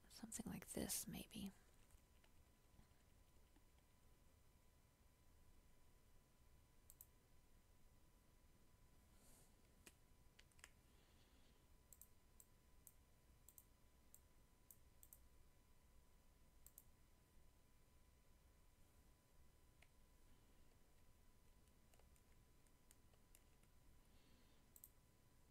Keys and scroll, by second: 10.5 ctrl+z, 20.8 ctrl+j.